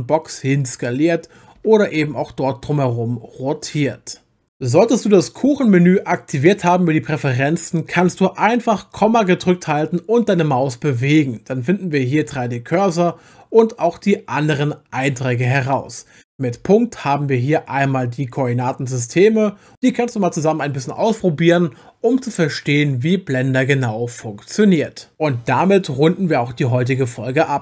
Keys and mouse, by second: 1.6 Escape, 1.9 r, 16.5 !, 19.7 !.